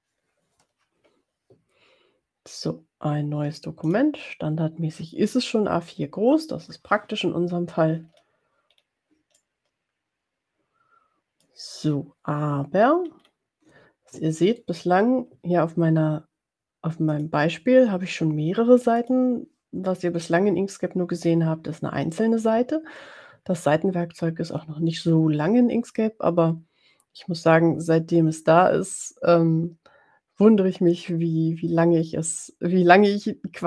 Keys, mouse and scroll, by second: 3.9 click, 8.0-8.9 ctrl+scroll down 4, 9.6-11.7 drag, 12.9-13.7 ctrl+scroll down 4, 19.2 click.